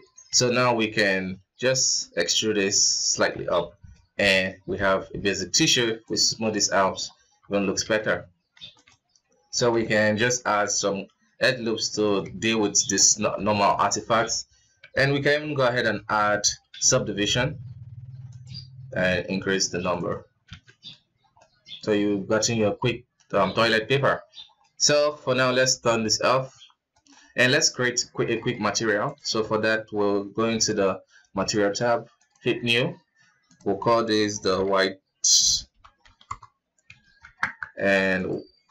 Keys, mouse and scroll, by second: 3.0 Tab, 3.3-3.8 middle drag, 3.8 scroll down 3, 4.1-4.5 middle drag, 4.5 scroll up 2, 5.1 w, 6.3-7.1 middle drag, 7.1 Tab, 7.6 alt+a, 8.2 ctrl+r, 9.9 ctrl+r, 12.0 Tab, 12.2-13.0 middle drag, 13.0 alt+a, 13.1-13.7 middle drag, 13.7 right click, 13.8 KP_1, 15.3 ctrl+g, 16.1 ctrl+d, 16.6-18.0 middle drag, 18.0-20.0 drag, 20.0 scroll down 2, 20.2 alt+a, 20.4-20.7 middle drag, 20.7-21.1 scroll up 4, 21.1-23.2 middle drag, 23.2 scroll up 1, 23.4 KP_1, 24.0-24.3 scroll down 5, 24.3-25.6 middle drag, 25.6 click, 26.1 scroll down 2, 26.3 KP_1, 26.6 right click, 27.1-28.3 middle drag, 28.3 z, 29.1-30.2 scroll up 4, 31.2 click, 31.9-37.1 drag, 37.1 Tab, 37.9-38.7 drag.